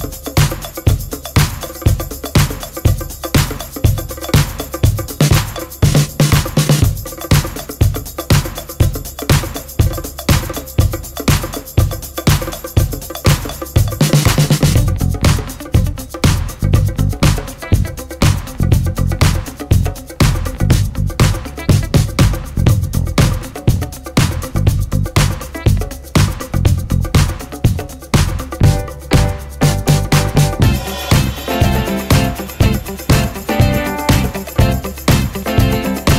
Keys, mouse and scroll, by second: 2.6-2.9 scroll up 1, 3.1 click, 3.5-4.0 scroll down 1, 4.0-8.0 drag, 8.0 ctrl+space, 8.3 click, 9.3 ctrl+space, 10.1-19.1 drag, 19.1-19.7 scroll down 1, 20.2-27.8 drag, 27.8 ctrl+space, 28.1 click, 32.4 scroll down 1, 32.9 click, 33.6-34.0 scroll up 1, 35.4 click.